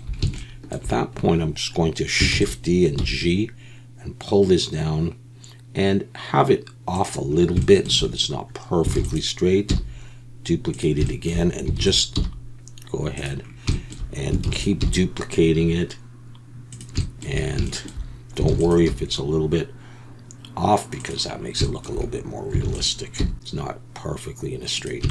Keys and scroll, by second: 2.3 shift+d, 3.0 g, 9.0 shift+d, 9.7 g, 11.8 shift+d, 12.1 g, 14.4 shift+d, 15.0 g, 18.5 shift+d, 18.9 g, 22.6 shift+d, 23.2 g.